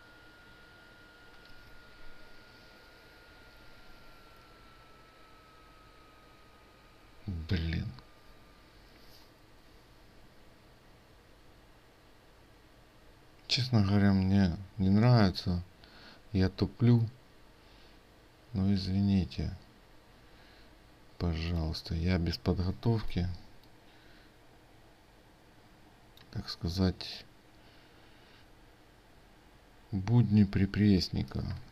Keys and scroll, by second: 31.4 ctrl+alt+2.